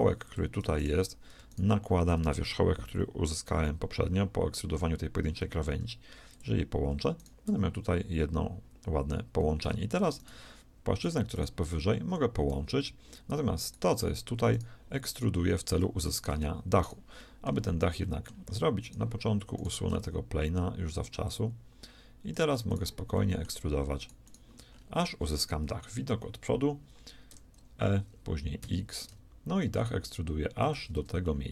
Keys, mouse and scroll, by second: 5.4 alt+m, 7.1-8.2 right drag, 7.4 g, 12.0 f, 12.4 a, 16.8 shift+right click, 18.2-19.7 drag, 18.2-21.5 right drag, 20.0 x, 22.3 shift+right click, 23.1-25.1 shift+middle drag, 25.7 KP_1, 27.4 e, 31.2-31.5 shift+drag.